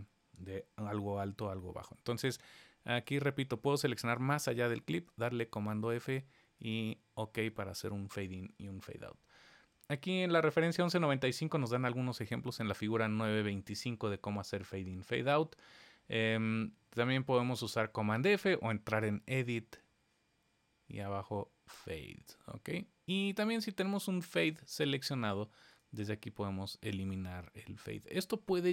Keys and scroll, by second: 4.6 super+f.